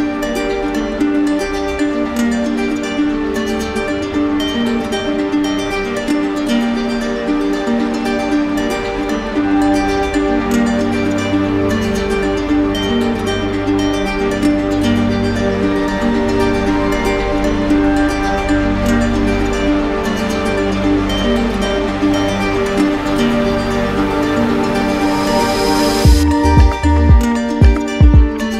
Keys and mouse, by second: 0.4 click, 1.5 right click, 2.1 ctrl+alt+z, 2.7 right click, 3.6 shift+click, 4.2 shift+click, 6.8 shift+click, 7.4 shift+click, 8.2 shift+click, 8.9 shift+click, 10.1 shift+click, 12.0 right click, 13.8 shift+right click, 14.8 right click, 14.8 shift+click, 15.6 shift+click, 17.5 alt+right click, 18.5 click, 21.0 click, 24.7 click, 25.4 click, 27.7 click, 28.2 shift+click.